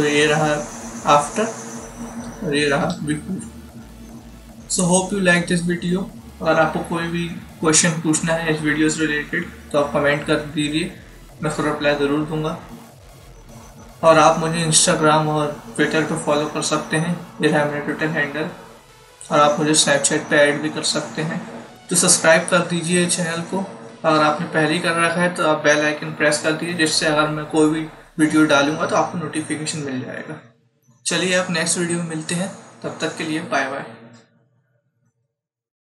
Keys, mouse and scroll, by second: 2.7 ctrl+z.